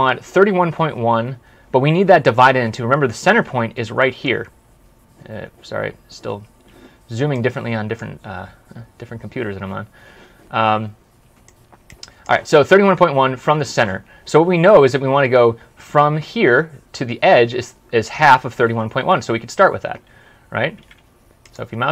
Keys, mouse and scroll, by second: 4.3 ctrl+scroll down 1, 4.9 ctrl+scroll up 1, 8.4 ctrl+scroll up 1, 8.8 ctrl+scroll down 1, 20.6 typing, 21.8 typing.